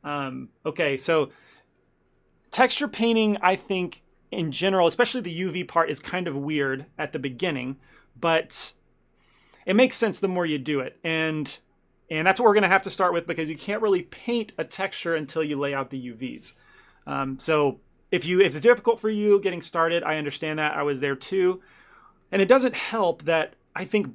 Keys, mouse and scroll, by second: 18.2 middle click, 22.0 middle click, 22.3 shift+middle click, 22.8 ctrl+middle click, 23.1 middle click, 23.5 shift+middle click, 24.0 ctrl+middle click.